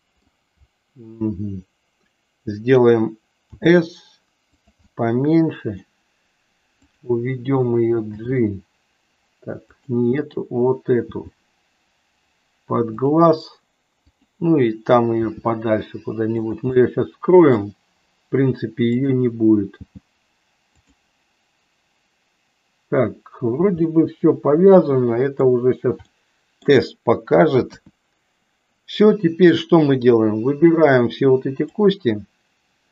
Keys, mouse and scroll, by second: 3.4 s, 4.8-6.0 middle drag, 6.8 click, 8.1 g, 10.2 click, 11.1 g, 14.1 click, 15.2 g, 16.9 middle click, 19.8 g, 23.8-25.5 middle drag, 26.2 middle click, 27.6 KP_1, 30.1-31.8 drag.